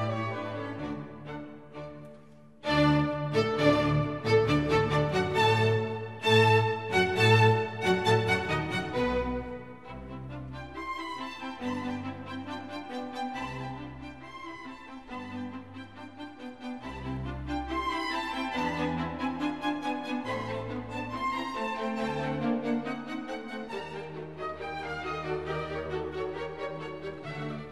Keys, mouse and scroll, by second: 9.4 ctrl+d, 10.2-11.1 scroll down 13, 11.4 scroll down 1, 11.5-12.4 scroll up 9, 14.6-17.5 scroll down 20, 21.3-21.8 scroll down 10, 23.9 right click.